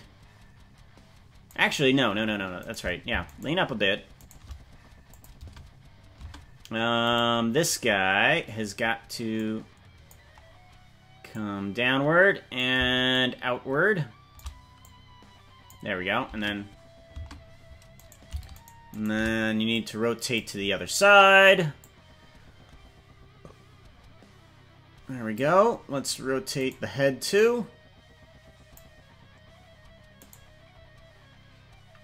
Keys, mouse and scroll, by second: 2.6 right click, 3.4 shift+right click, 4.2 right click, 5.1 click, 5.4 space, 6.2 space, 7.2 right click, 9.3 click, 11.3-12.6 drag, 13.1-14.4 shift+drag, 14.8 click, 16.3 space, 17.3 space, 18.0 right click, 19.0 right click, 19.7 click, 21.8-25.3 drag, 26.0 right click, 27.3-28.7 drag, 30.3 right click.